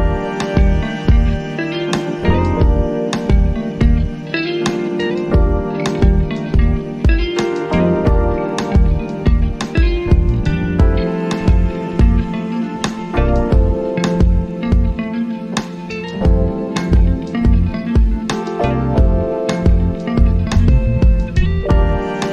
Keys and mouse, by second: 3.0-11.7 drag, 16.5 click, 21.5 click.